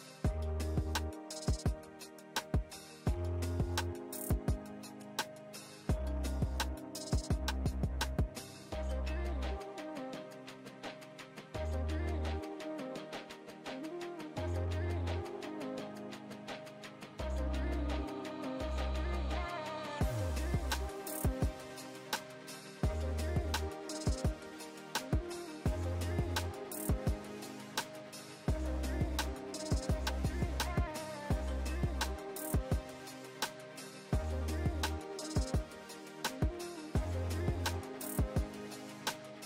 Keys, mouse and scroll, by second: 1.5 ctrl+space, 1.9-3.1 ctrl+click, 2.0 ctrl+space, 3.8 click, 5.1 ctrl+a, 5.5-6.5 typing, 7.6 Return, 9.2 scroll down 1, 10.9 scroll up 1, 12.0 scroll down 1, 13.9 click, 16.6 click, 17.1 scroll down 1, 19.5-20.6 scroll down 2, 21.3 scroll up 1, 22.2 click, 23.5 scroll down 1, 23.8 scroll up 1, 24.1 right click, 24.8 click, 25.2 right click, 25.7 click, 26.0 alt+Tab, 26.8 ctrl+v, 27.5-27.9 click, 27.8 ctrl+space, 27.9-28.4 ctrl+click, 28.3-30.9 drag, 31.5-32.6 shift+drag, 37.0 ctrl+shift+[, 37.3 ctrl+], 38.0 ctrl+].